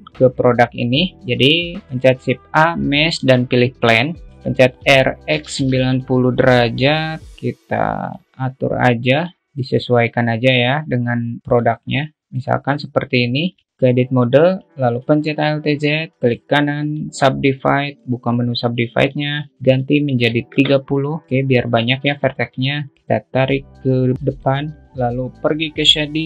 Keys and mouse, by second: 2.4 shift+a, 4.8 r, 7.1 click, 7.7 s, 8.6 s, 9.4 shift+middle click, 10.2-12.1 drag, 14.3 Tab, 15.5 alt+z, 16.7 right click, 18.1 click, 19.5-21.2 drag, 21.5 click, 22.2 Tab, 22.7-23.8 alt+middle drag, 23.8 click, 24.6 alt+z.